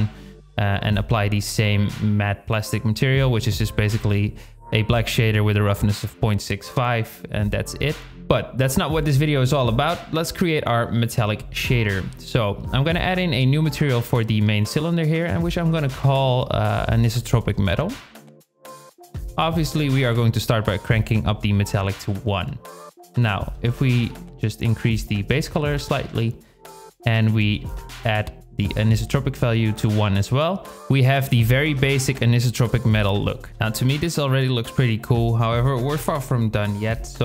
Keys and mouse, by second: 0.0 click, 9.5 z, 9.8-10.4 drag, 11.6 n, 15.5 click, 16.5-20.1 drag, 20.8 shift+click, 22.7 click, 31.6-32.9 drag, 35.0 shift+click.